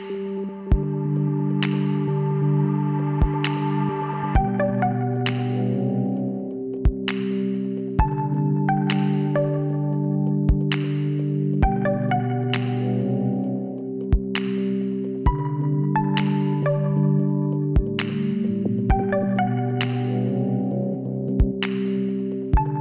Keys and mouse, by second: 3.2 click, 3.7-5.3 middle drag, 3.8-4.9 drag, 5.3 click, 6.0 ctrl+e, 12.1 click, 12.7-13.9 middle drag, 14.1 middle click, 17.1-18.6 middle drag, 17.6 w.